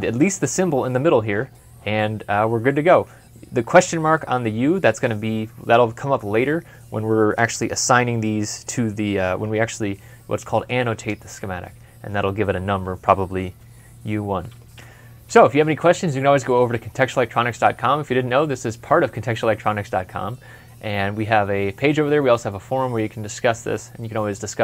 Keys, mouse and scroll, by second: 15.1 ctrl+F11.